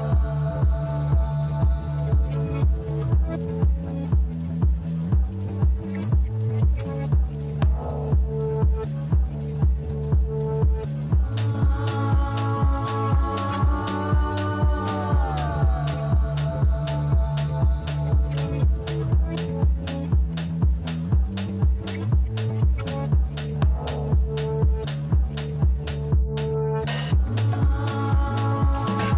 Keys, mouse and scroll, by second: 1.9-2.4 scroll down 2, 2.4-3.3 middle drag, 3.3-4.3 scroll up 5, 4.3-6.2 middle drag, 6.2 click, 7.0 Tab, 7.6-10.4 middle drag, 10.4 click, 11.9 click, 13.0 alt+shift+click, 15.2 KP_3, 16.6 e, 20.9 shift+z, 21.5 middle click, 22.4 shift+z, 23.0 Tab, 23.6-24.7 middle drag, 24.7 click, 26.1 drag, 26.8 click.